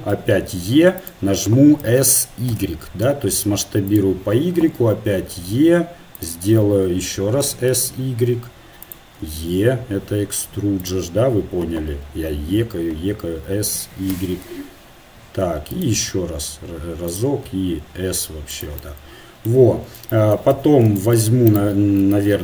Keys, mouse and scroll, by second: 0.1 e, 1.8 s, 4.6 e, 7.2 s, 9.2 e, 13.7 s, 16.1 e, 17.5 s, 20.6 z, 22.1 ctrl+Tab.